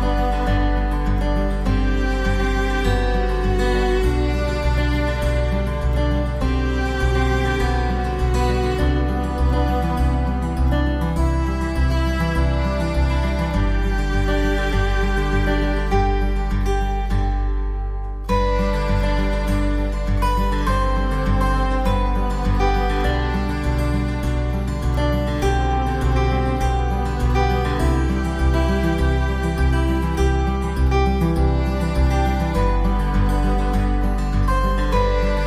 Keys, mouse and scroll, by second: 2.4 click, 2.5 click, 3.1 click, 5.1 click, 6.7 right click, 7.4 x, 8.6 middle click, 9.2 right click, 9.9 Tab, 10.3 scroll up 4, 10.8 middle click, 11.2-12.1 scroll up 5, 13.2 click, 16.7-17.1 scroll up 3, 17.3 shift+middle click, 18.1-18.7 scroll up 1, 18.7 right click, 20.7 click, 28.6 right click, 30.7 shift+right click, 32.0 g, 34.3-35.0 scroll down 4.